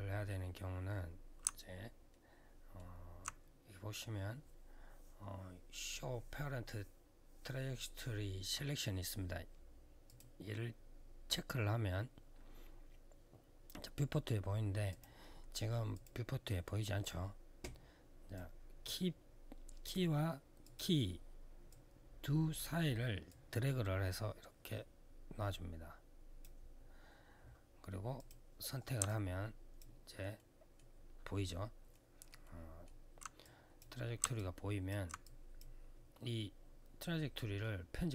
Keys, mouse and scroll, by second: 1.9 alt+middle click, 9.8 click, 14.6 click, 15.7 click, 16.8 click, 18.1 click, 20.4 click, 20.5 click, 21.4 click, 23.0 click, 27.9 click, 28.8 alt+click, 30.1 alt+middle click, 30.6 alt+scroll up 1, 31.7 alt+middle click, 32.2 alt+middle click, 33.2 click, 34.1 alt+click, 34.6 click, 35.0 click, 37.9 click.